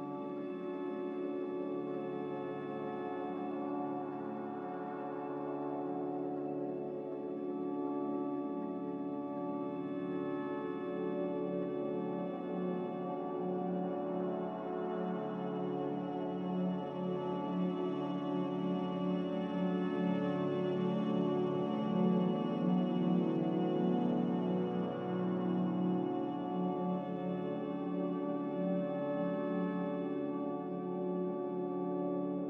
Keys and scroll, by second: 5.0 b, 7.0 Delete, 8.4 Delete, 11.7 b, 12.2 n, 22.4 z.